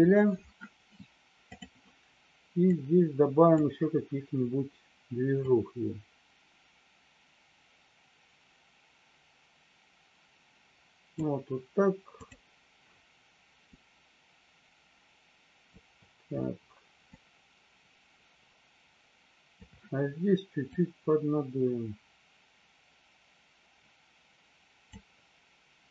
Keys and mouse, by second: 2.6 click, 5.6-11.2 drag, 12.2 click, 13.7-15.8 drag, 17.1-19.6 drag, 20.7-24.9 drag.